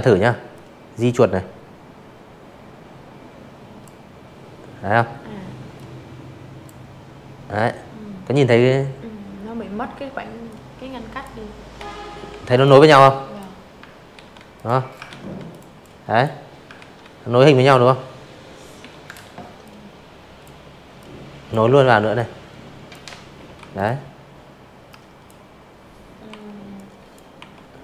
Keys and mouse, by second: 2.7 click, 7.4 click, 9.0-9.8 typing, 9.5 click, 10.0 click, 11.1 ctrl+z, 11.1 ctrl+x, 11.5 click, 12.0 ctrl+z, 12.5 drag, 12.8-13.2 drag, 13.7 ctrl+z, 15.7 m, 16.6 click, 17.9 click, 19.1 click, 20.5 v, 20.7 drag, 21.8-22.2 drag, 23.2 Delete, 23.7 click, 24.3 Delete, 24.8 click, 26.1 click.